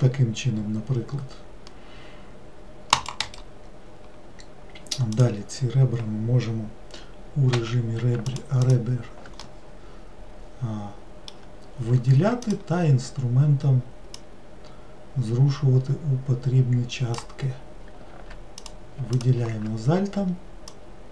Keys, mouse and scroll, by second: 5.2 click, 7.6 2, 8.3 alt+click, 8.6 alt+click, 9.4-12.5 middle drag, 12.5-14.4 drag, 18.6 click, 19.2 alt+click, 20.7 click.